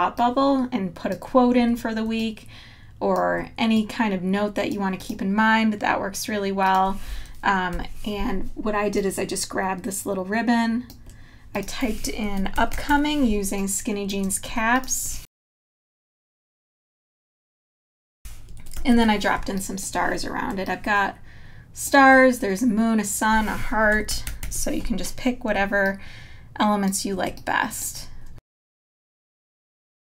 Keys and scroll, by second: 7.7 BackSpace, 12.6 super+=, 13.3 space, 14.5-16.5 typing, 17.1 Up, 18.8 super+-, 19.3 space, 24.2 super+=, 29.9 space.